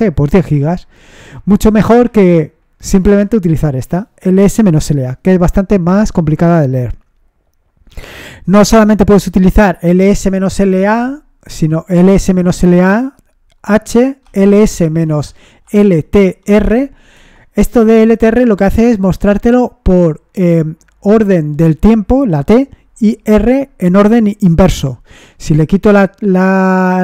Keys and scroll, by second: 2.0 Up, 2.8 BackSpace, 14.0-16.9 typing, 17.1 Return, 25.4 Up, 25.7 BackSpace.